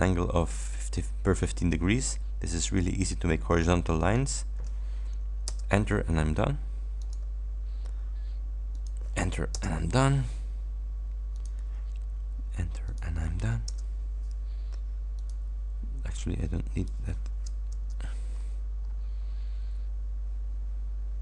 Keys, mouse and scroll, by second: 4.1 ctrl+click, 5.5 Return, 7.1 ctrl+click, 8.8 ctrl+click, 9.6 Return, 11.4 click, 12.9 ctrl+click, 13.7 Return, 15.3 click, 16.9 click, 17.8 Return, 18.4-19.1 scroll down 2.